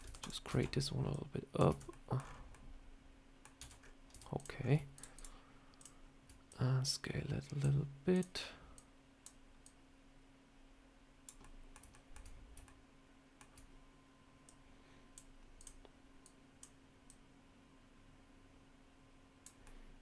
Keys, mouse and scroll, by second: 0.1 click, 0.4 Tab, 1.0 click, 1.6 Tab, 1.8 middle click, 2.0 scroll down 6, 2.4 middle click, 3.5 Tab, 3.7 scroll up 3, 4.0 Tab, 4.2 click, 4.5 scroll up 3, 4.8 shift+click, 6.4 click, 8.0 click, 8.6 click, 9.5 click, 11.3 middle click, 11.8 shift+middle click, 12.5 middle click, 14.3 click, 15.5 click, 16.1 click, 17.0 click, 19.5 middle click.